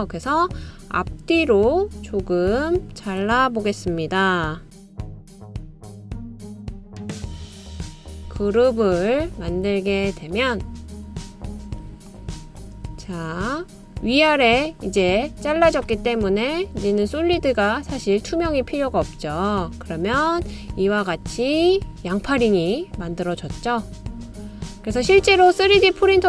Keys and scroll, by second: 5.2 super+c, 5.2 super+v.